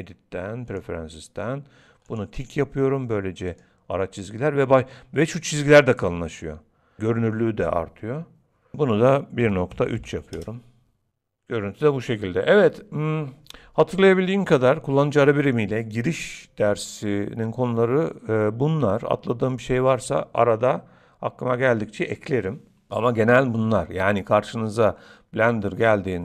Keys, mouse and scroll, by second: 11.0 middle click.